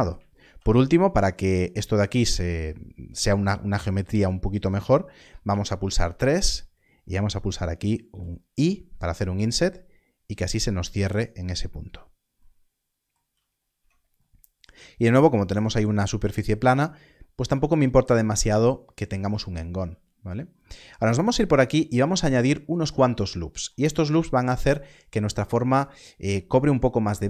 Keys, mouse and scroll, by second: 6.0 click, 8.0 click, 10.5 i, 10.5 click, 13.2 click, 13.7 Tab, 19.9 Tab, 19.9-20.9 scroll up 1, 21.9 Tab.